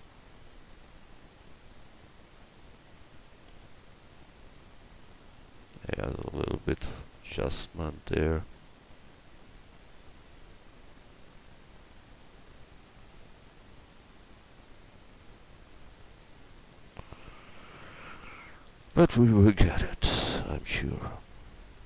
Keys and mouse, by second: 0.5 right click, 3.5 a, 5.6 right click, 6.8 s, 10.6 s, 17.8 Tab, 18.7 a, 18.9 a.